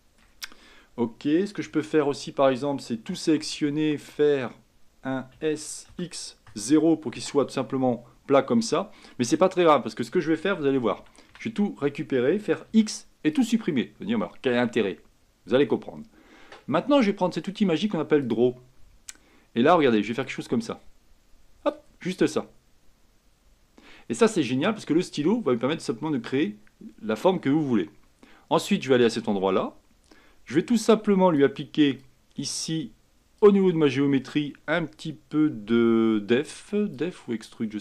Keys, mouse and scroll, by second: 1.8 Tab, 3.2 a, 3.5 a, 5.5 s, 11.1 a, 11.4 a, 12.8 x, 15.3-18.3 scroll down 1, 18.3-29.2 drag, 30.2-33.8 drag, 33.8-34.8 scroll down 3, 34.8-35.6 scroll down 1, 35.6-36.5 scroll down 1, 36.5-37.1 scroll down 1, 37.1-37.8 drag.